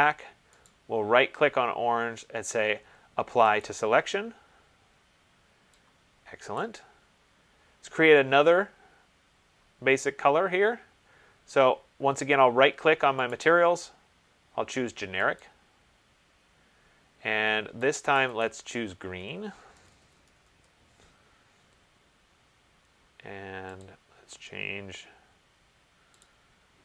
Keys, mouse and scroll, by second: 0.9 right click, 3.8 click, 6.8 click, 13.7 right click, 15.7 click, 18.4 click, 18.6 click, 19.7 ctrl+a, 20.1-20.8 typing, 24.0 click, 26.4 click.